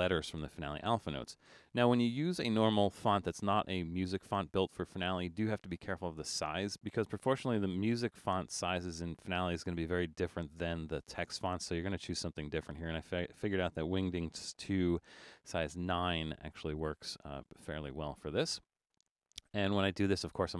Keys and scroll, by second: 15.4 9.